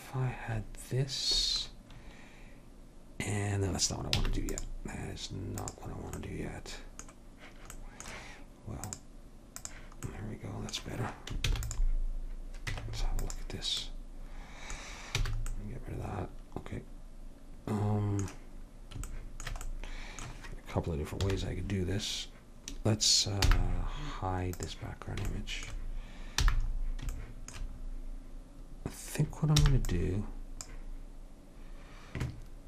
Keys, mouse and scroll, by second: 4.3 x, 5.7-7.5 drag, 8.9-11.0 drag, 11.5 ctrl+s, 12.9 Tab, 15.3 a, 21.3 KP_1, 23.6 n, 24.7-26.6 drag, 26.6 n, 29.7 b.